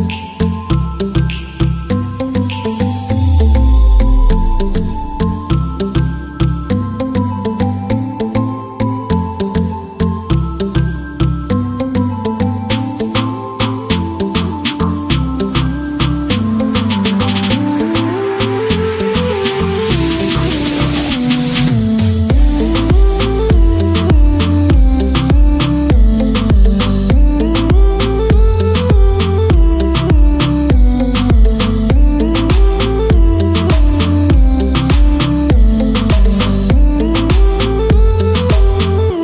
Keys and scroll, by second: 13.5 b, 14.1 shift+., 15.6-20.9 typing, 22.5 t, 26.9-28.8 typing, 30.3 BackSpace, 31.5-36.8 typing.